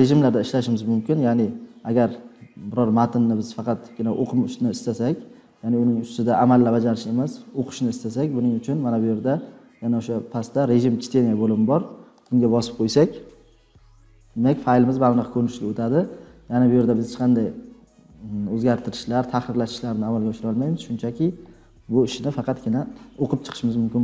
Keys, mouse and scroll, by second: 12.1 click, 13.2-13.8 drag, 17.1 click, 19.7 click.